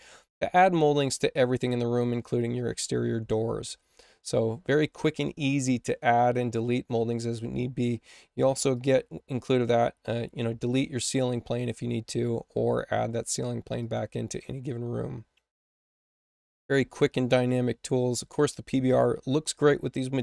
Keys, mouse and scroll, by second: 8.7 click, 9.4 click, 13.0 click, 13.7 click.